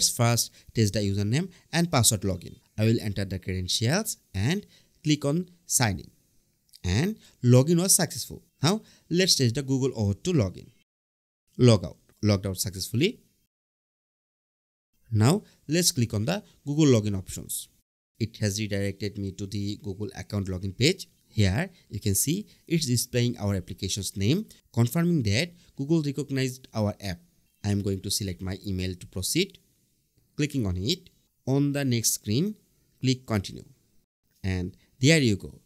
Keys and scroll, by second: 1.6 Tab, 7.7 Right, 10.6 Return, 14.9 BackSpace, 15.2 Return.